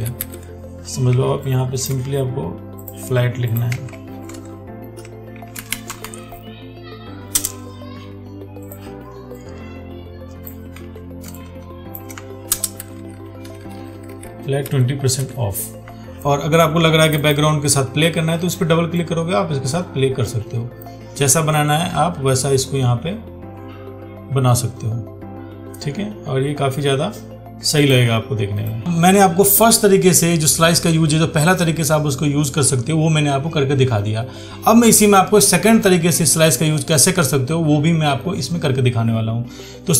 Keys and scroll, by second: 3.9 ctrl+a, 11.0 ctrl+t.